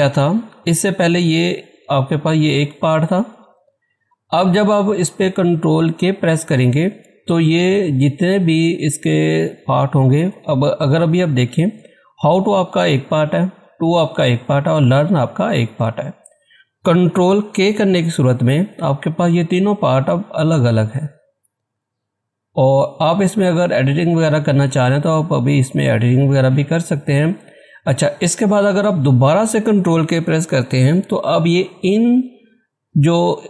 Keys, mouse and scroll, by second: 0.6-5.9 drag, 17.4 ctrl+Caps_Lock, 17.8 ctrl+k, 18.4 click, 24.3 typing, 27.8 click, 27.8 typing.